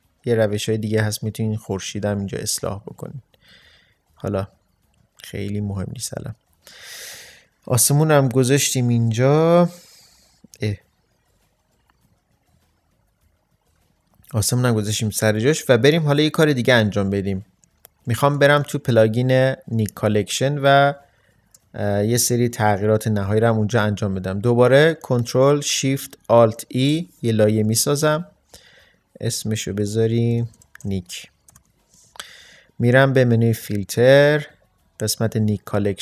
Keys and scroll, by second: 9.5 ctrl+z, 26.6 ctrl+alt+shift+e, 30.4-31.5 typing.